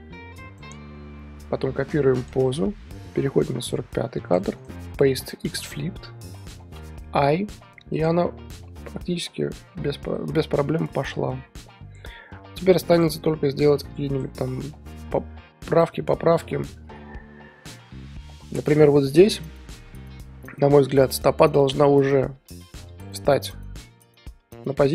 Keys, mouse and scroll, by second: 3.2 click, 4.5-6.7 right drag, 8.0 click, 8.5 scroll down 1, 8.7-10.2 middle drag, 10.2-10.9 scroll up 4, 10.9 KP_3, 12.8-21.1 drag, 21.7 click, 21.9 r, 24.2 i.